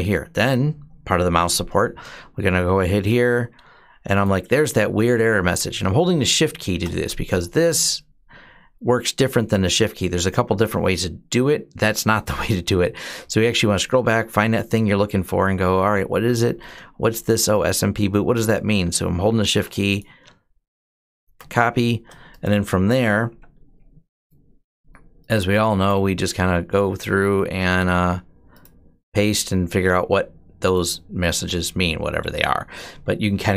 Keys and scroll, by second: 29.0 Return.